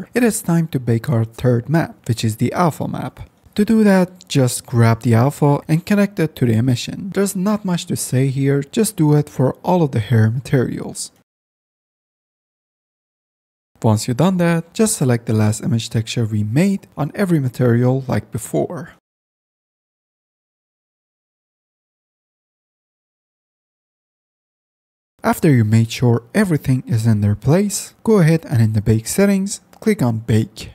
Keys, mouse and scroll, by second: 0.0 click, 0.9 click, 1.5 click, 3.2 ctrl+s, 4.3 click, 5.3 click, 6.3-7.0 drag, 18.6 middle click, 19.3 middle click, 20.8 middle click, 22.3 middle click, 23.4 middle click, 24.1-24.6 middle drag, 24.6 click, 30.2 F10.